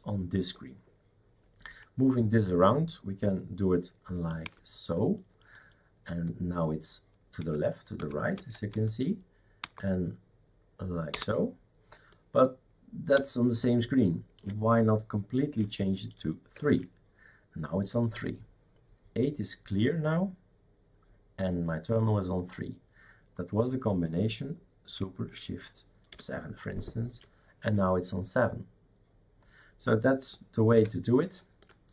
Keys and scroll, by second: 4.5 shift+super+Left, 7.4 shift+super+Right, 8.0 shift+super+Left, 8.4 shift+super+Right, 8.7 shift+super+Up, 9.6 shift+super+Down, 11.2 shift+super+Up, 13.2 shift+super+Left, 16.7 shift+super+3, 26.1 shift+super+7, 30.8 alt+Right.